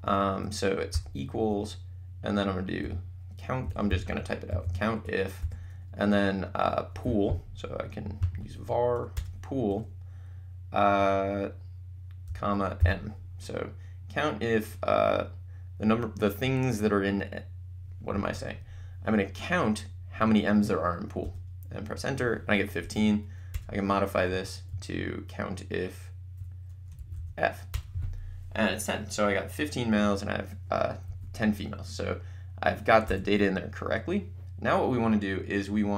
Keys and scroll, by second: 0.9 =, 2.9-5.4 typing, 9.1 Return, 12.3 ,, 12.8 m, 21.3 Return, 22.8 Up, 23.6 Return, 24.3 Right, 27.1 f, 27.7 Return, 31.1 Up, 33.1 BackSpace.